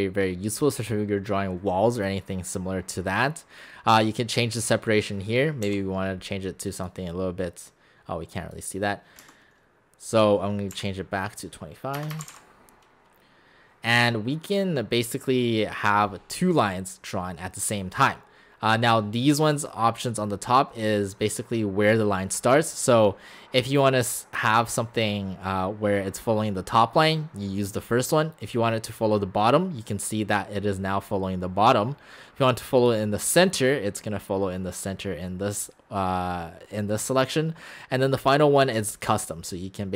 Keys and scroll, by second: 5.7 5, 9.2 Escape, 10.7 5, 12.0 BackSpace, 12.1 BackSpace.